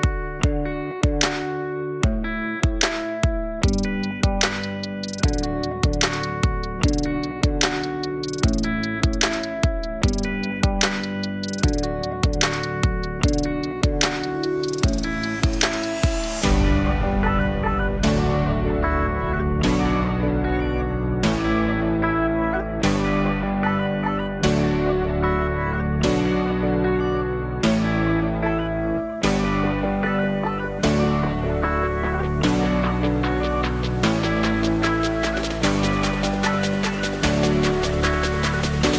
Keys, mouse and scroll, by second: 3.4-5.9 drag, 9.1 click, 10.0 ctrl+shift+click, 15.8-22.8 drag, 37.2 click.